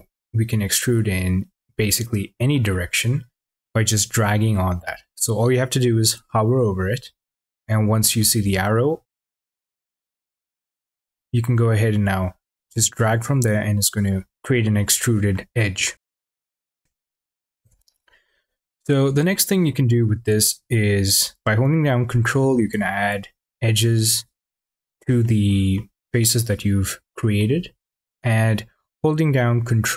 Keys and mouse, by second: 0.1 click, 2.2 click, 9.4 click, 14.9 shift+drag, 17.4 ctrl+z, 23.3 ctrl+click, 24.1 ctrl+click, 25.0 click, 27.2 click.